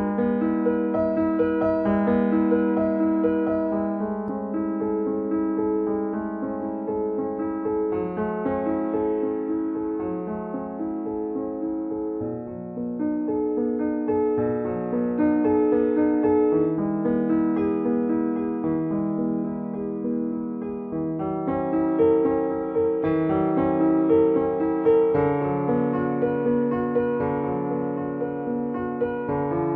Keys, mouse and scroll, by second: 1.3 click, 6.5 shift+click, 8.6 shift+click, 10.9 shift+click, 17.4-20.3 middle drag, 20.3 shift+click, 23.8-28.4 middle drag, 28.4 e, 29.6 y.